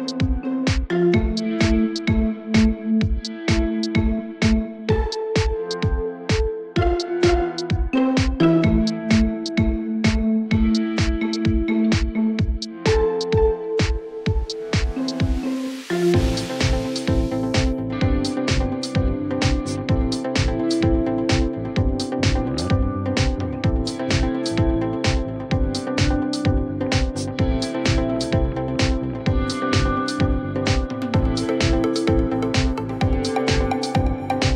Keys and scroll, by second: 1.0 F4, 4.3 F4, 13.8 ctrl+BackSpace, 16.0 1, 16.3 F4, 20.4 F4, 21.7-22.6 typing, 24.7 F3, 24.9 1, 25.1 F3, 27.2 alt+q, 27.8 F3, 28.1 alt+x, 29.2 g, 29.6 alt+x, 29.9 F4, 30.3 r, 34.4 w.